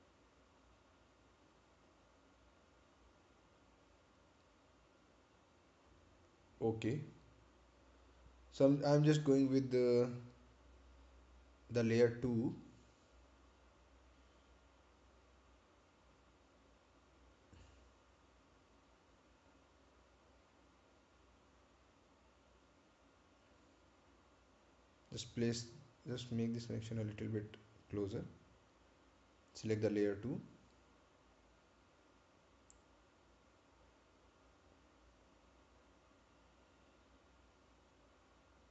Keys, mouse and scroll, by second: 0.1 click, 12.6 click, 15.5 click, 21.0 right click, 23.6 click, 32.3 click.